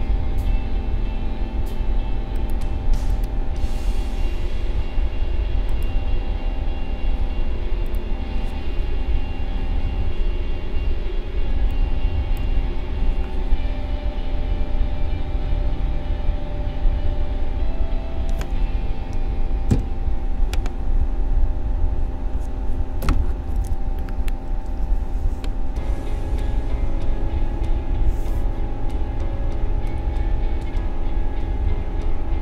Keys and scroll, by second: 11.5 space, 19.7 n.